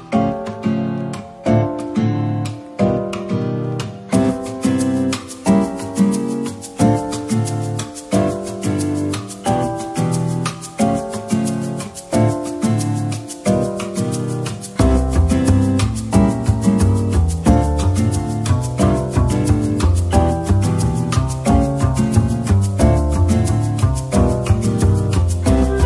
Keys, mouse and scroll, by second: 2.9 middle click, 3.2 Tab, 3.6-3.9 scroll down 1, 3.9 middle click, 6.2 double click, 6.7-7.0 scroll down 1, 7.0 middle click, 8.3 /, 9.2-10.3 scroll down 1, 10.9 shift+click, 12.6 shift+click, 13.0 shift+double click, 13.9 typing, 15.3 middle click, 16.8-17.3 typing, 18.4 middle click, 19.3-21.3 typing, 22.4 middle click, 23.4 typing, 24.8 typing.